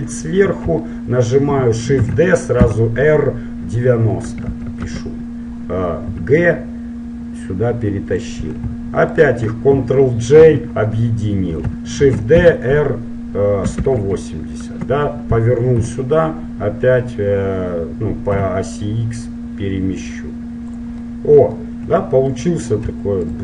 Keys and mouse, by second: 2.1 shift+d, 6.3 g, 9.2-11.1 right drag, 10.5 ctrl+j, 12.1 shift+d, 16.1 g, 21.2 middle click, 23.3-23.4 right drag.